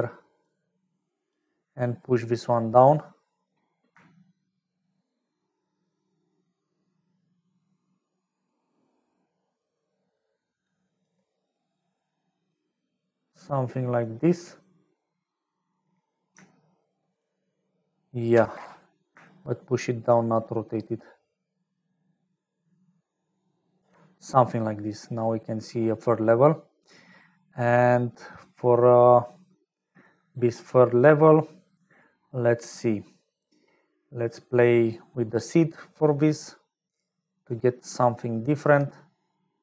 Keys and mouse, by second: 0.0 click, 1.1 click, 1.8-3.5 middle drag, 4.9-11.2 shift+middle drag, 17.2-24.2 middle drag, 24.4-26.2 middle drag, 27.2 middle click, 28.3 middle click, 36.2 middle click, 37.3 click, 37.9 click, 39.5 click.